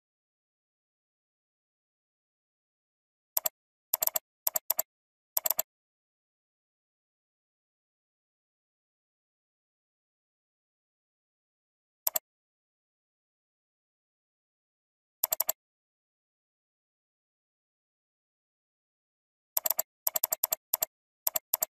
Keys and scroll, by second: 14.8 ctrl+g.